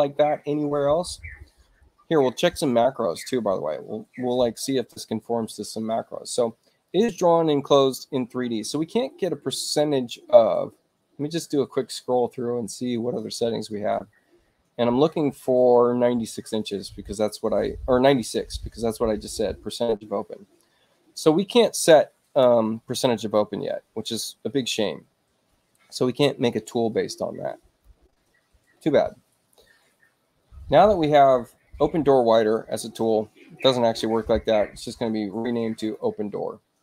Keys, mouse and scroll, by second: 6.7 click, 11.3 middle click, 12.6 middle click, 13.8 middle click, 14.4 middle click, 15.6 middle click, 17.0 middle click, 18.4 middle click, 20.5 middle click, 23.6-24.6 middle drag, 27.6-28.9 drag, 29.2 click, 35.7 click.